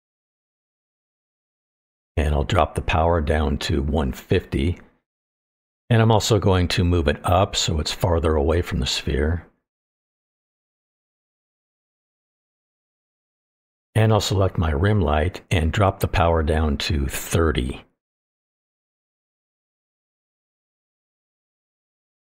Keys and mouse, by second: 0.0 middle click, 0.6 click, 0.8 click, 1.8-2.3 middle drag, 3.6-4.7 drag, 6.6 click, 6.9 middle drag, 7.8-9.9 drag, 10.1-10.6 middle drag, 11.1 click, 11.3-11.6 middle drag, 12.2-13.4 drag, 13.7-14.2 middle drag, 16.7-17.8 drag, 20.9 click, 21.4-22.2 drag.